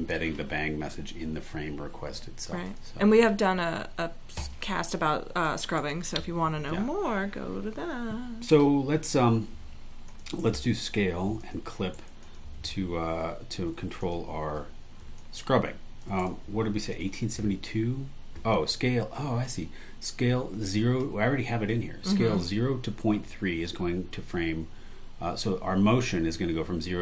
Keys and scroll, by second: 5.8 super+e, 10.4 super+e, 11.9 super+e, 16.2 alt+super+e, 17.1 super+e.